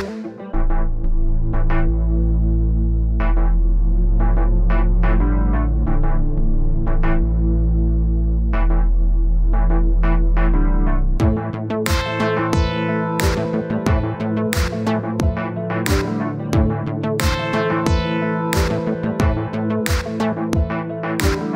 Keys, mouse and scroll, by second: 0.3 click, 2.1 click, 3.1-4.9 middle drag, 4.9-5.8 scroll down 2, 5.8-6.2 scroll down 1, 6.2-7.3 drag, 7.8-9.0 middle drag, 9.0 click, 9.5 click, 10.1-10.6 scroll up 5, 10.7 click, 11.3-12.5 middle drag, 13.3-14.0 scroll up 4, 14.0-14.4 scroll down 6, 14.4 middle click, 15.3-15.9 scroll down 1, 15.9 click, 16.2 middle click, 16.6 KP_1, 17.2-18.4 drag, 18.8-20.0 drag, 20.8 click, 21.1-21.5 middle drag.